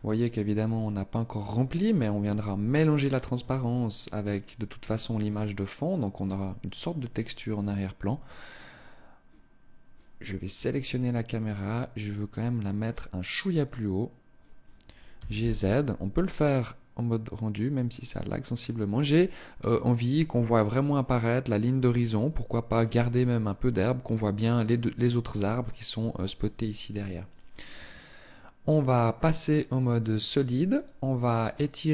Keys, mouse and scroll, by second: 10.0-10.8 scroll up 1, 10.8 click, 12.2 right click, 18.1 click, 28.2 click, 30.4 right click, 31.2-31.7 scroll down 1.